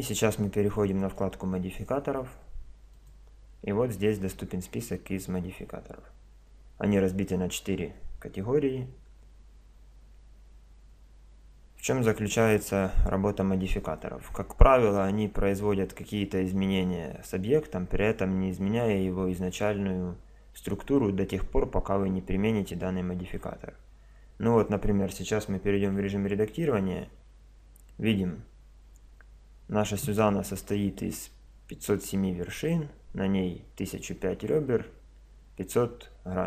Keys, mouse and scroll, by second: 1.0-2.7 drag, 2.9-4.7 drag, 26.0 Tab.